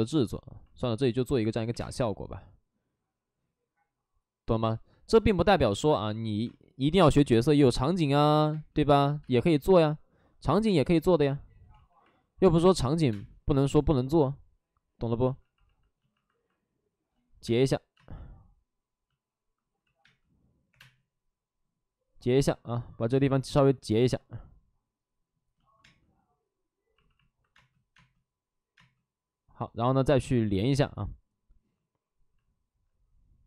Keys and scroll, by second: 1.6 3, 3.5 space, 6.3 space, 6.9 space, 8.4 space, 9.1 space, 10.6 space, 10.9 3, 11.6 ctrl+z, 12.9 3, 13.0 space, 17.3 space, 17.8 space, 19.7 ctrl+z, 19.9 space, 20.6 3, 25.7 space, 27.4 space, 27.8 space, 30.4 b.